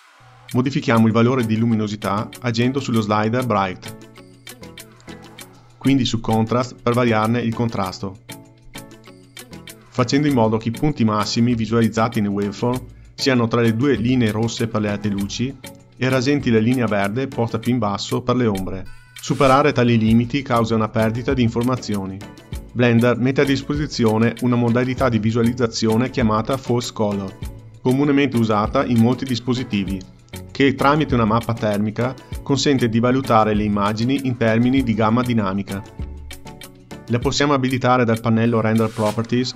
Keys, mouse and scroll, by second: 0.1 scroll up 3, 2.2-5.4 drag, 6.9-10.2 drag.